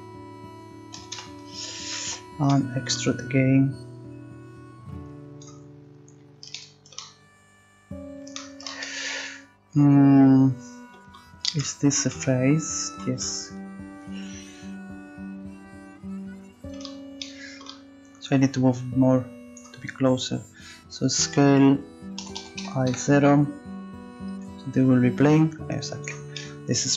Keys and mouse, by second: 0.9 e, 3.5 click, 8.6-9.8 middle drag, 10.0 middle click, 18.3-19.9 drag, 21.2 s, 24.6-26.2 drag.